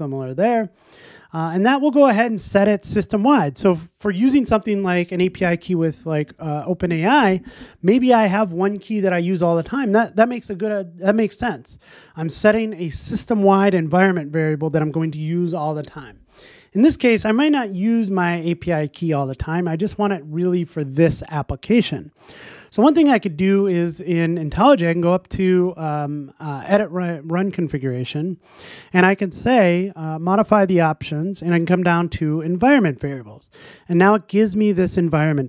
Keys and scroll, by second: 1.7 shift+Escape, 27.3 typing.